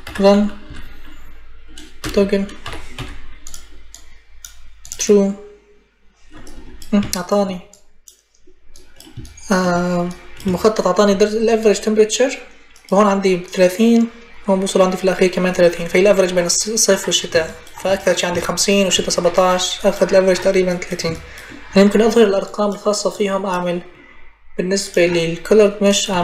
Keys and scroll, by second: 0.5 g, 1.8 BackSpace, 2.4 o, 2.7 g, 25.6-26.2 typing.